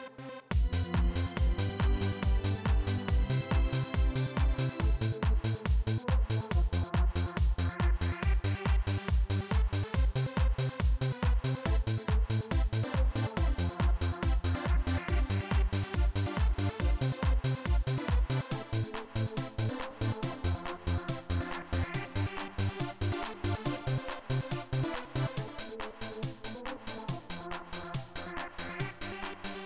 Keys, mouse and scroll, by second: 0.3 click, 6.7 click, 7.9 click, 8.8 click, 15.0-16.8 drag, 20.6-24.3 drag, 26.8 click, 28.5-29.6 drag.